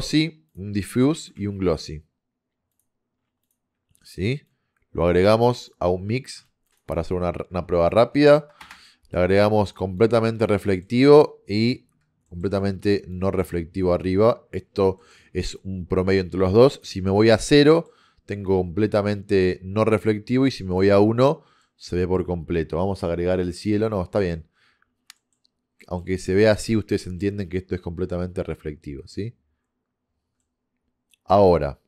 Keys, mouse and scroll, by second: 1.4 shift+a, 3.8-4.5 middle drag, 4.5-5.7 drag, 8.7 click, 10.0 click, 10.7-12.8 middle drag, 12.8-14.8 drag, 15.0-18.3 middle drag, 19.5 middle click, 20.7 middle click, 20.9-23.5 middle drag, 24.0-28.6 middle drag, 30.4 middle click.